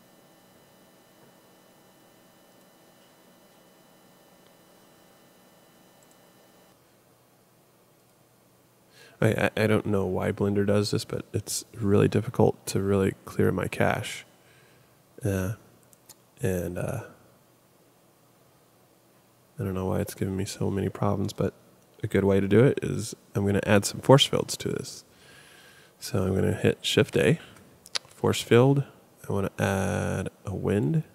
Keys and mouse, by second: 2.5-4.5 drag, 6.0 click, 6.7 x, 10.0 click, 11.5 click, 27.1 shift+a.